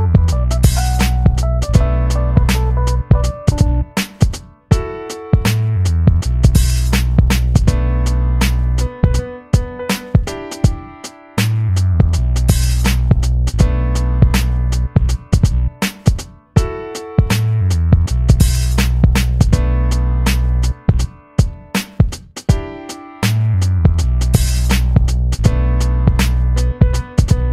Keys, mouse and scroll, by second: 2.8-15.0 drag, 2.8 typing, 15.0-18.0 drag, 18.0-20.0 drag, 20.0-21.9 drag, 21.9-25.9 drag, 25.9 shift+m.